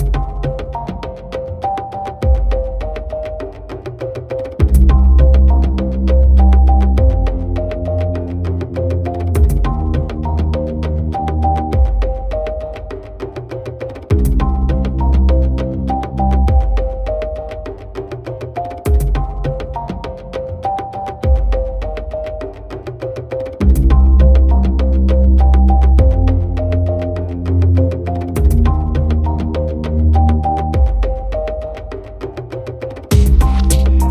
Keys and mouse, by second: 0.0 right click, 1.5 right click, 1.7 right click, 2.5 right click, 2.8 right click, 3.8 right click, 4.3 right click, 4.6 right click, 4.9 right click, 5.3 right click, 5.5 right click, 6.1 right click, 6.5 right click, 6.9 right click, 8.2 right click, 9.4 right click, 9.7 right click, 11.2 right click, 12.4 right click, 12.7 right click, 13.4 right click, 13.7 right click, 14.5 right click, 15.3 right click, 15.7 right click, 16.0 right click, 16.9 right click, 17.4 right click.